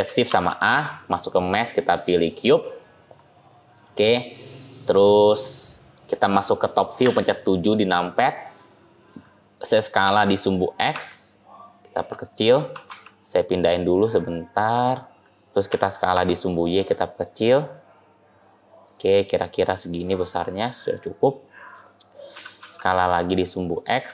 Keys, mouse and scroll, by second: 0.2 shift+a, 2.6 middle click, 5.4 middle click, 5.4 scroll down 1, 6.9 KP_7, 9.9 s, 12.6 g, 15.5 s, 19.0 scroll up 1, 19.0-19.9 scroll down 1, 19.9 middle click, 22.2 s.